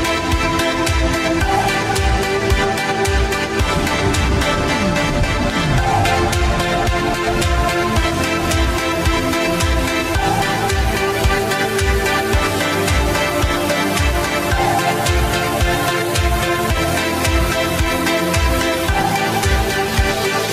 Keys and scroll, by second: 7.5 Left, 8.0 Left, 9.8 -, 12.6 w, 12.8 space, 13.8 w, 15.9 KP_Multiply, 16.1 Return, 16.3 q, 16.8 w, 18.8 space.